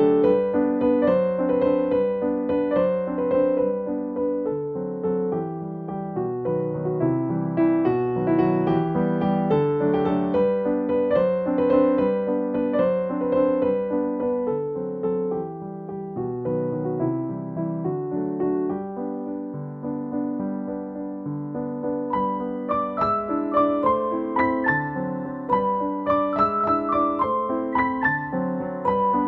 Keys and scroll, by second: 0.4 scroll up 1, 0.6 scroll down 1, 0.9 scroll up 1, 1.6 scroll up 1, 9.8 scroll down 1, 10.5-11.0 scroll up 1, 11.6-11.9 scroll down 1, 12.2-12.6 scroll up 1, 14.9 scroll down 1, 15.4 scroll up 1, 17.5-18.0 scroll down 1, 18.0-18.6 scroll up 1, 18.9 scroll down 1, 19.2 scroll up 1, 21.7 scroll down 1, 22.0 scroll up 1, 26.5 scroll down 1, 26.9-27.3 scroll up 1.